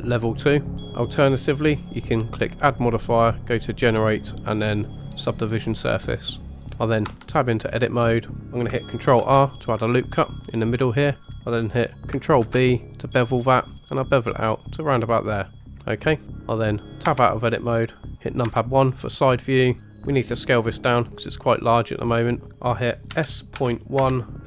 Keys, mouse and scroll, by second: 1.8-6.0 drag, 6.5 shift+middle click, 7.0 Tab, 7.6-8.6 scroll up 2, 9.1 ctrl+r, 12.4 ctrl+b, 17.0 Tab, 18.4 KP_1, 19.5 scroll down 2, 19.8 shift+middle click, 22.4 ctrl+z, 23.1 s.